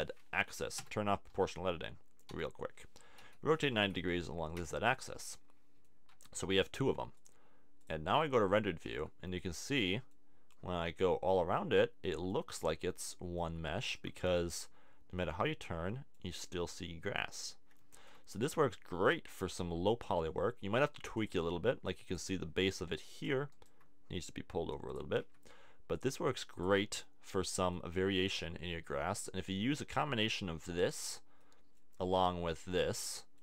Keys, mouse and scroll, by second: 2.3 o, 3.2 r, 5.0 click, 6.1 Tab, 8.9 Tab, 9.0 middle click, 20.7 middle click, 21.3 click, 25.2 Tab, 27.2 click.